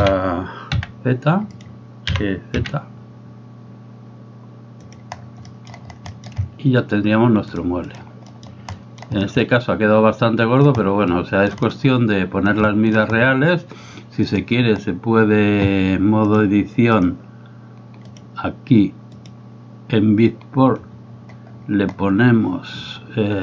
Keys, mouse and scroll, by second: 5.5 middle click, 6.3 shift+middle click, 7.6 click, 8.3 middle click, 8.7 middle drag, 9.5-10.7 middle drag, 11.2-11.5 middle drag, 12.7 shift+middle drag, 14.4 click, 16.3-17.1 drag, 18.1 click, 19.2-23.4 drag.